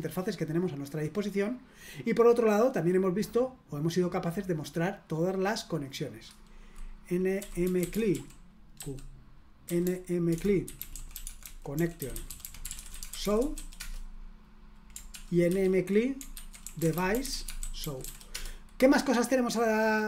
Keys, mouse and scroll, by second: 0.0-2.3 drag, 3.2-6.2 drag, 7.1-14.0 typing, 15.1 ctrl+p, 15.5 ctrl+w, 16.3 ctrl+w, 16.4-18.5 typing.